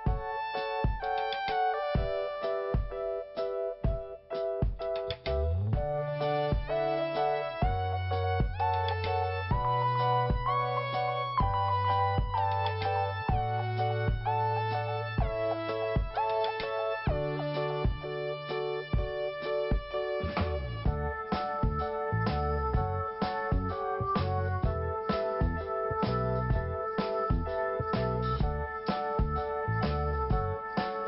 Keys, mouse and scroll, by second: 5.9 click, 6.9 scroll down 1, 7.7 scroll up 1, 8.6 scroll down 1, 9.2 click, 9.4 click, 11.1 click, 14.7 click, 19.2 click, 23.2 click, 23.3 click, 24.4 click, 24.8 click, 24.9 click, 25.5 click, 27.8 t, 28.3 scroll down 1, 29.1 scroll up 1.